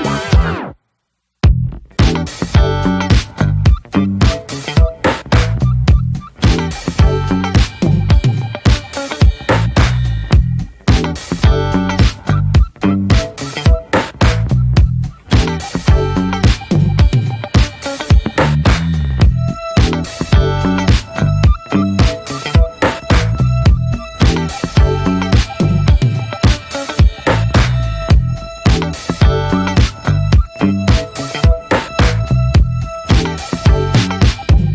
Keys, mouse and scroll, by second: 0.4-3.4 drag, 4.4-5.5 drag, 5.5-6.1 scroll down 1, 6.1 scroll down 1, 6.4 middle click, 7.0-7.4 scroll up 4, 7.4 shift+middle click, 7.8 scroll down 2, 7.9 shift+middle click, 8.6-8.9 scroll up 2, 8.9 middle click, 9.4 scroll up 1, 9.7 alt+middle click, 11.0 alt+middle click, 12.1 alt+middle click, 12.8-14.4 shift+middle drag, 14.4-20.1 drag, 20.1-20.6 scroll down 6, 20.3 middle click, 20.6 middle click, 21.4-22.8 middle drag, 23.9-24.4 scroll up 1, 24.5-24.8 scroll down 1, 24.8 scroll up 2, 25.0 click, 25.2 scroll down 1, 25.3 ctrl+z, 25.6 ctrl+z, 26.1 click, 27.1 ctrl+z, 27.4-28.5 drag, 29.1-30.4 drag, 30.4 ctrl+z, 30.7-31.8 drag, 32.6 shift+middle click, 33.4 scroll down 2, 33.6 middle click, 33.7 scroll up 1, 33.9-34.7 middle drag.